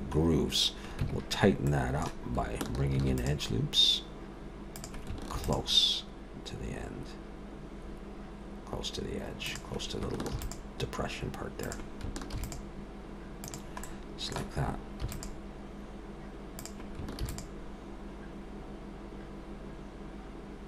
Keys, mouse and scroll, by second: 1.0 Tab, 1.7 middle click, 2.9 ctrl+r, 5.3 ctrl+r, 10.3 ctrl+r, 12.3 ctrl+r, 13.8 middle click, 15.0 ctrl+r, 17.2 ctrl+r.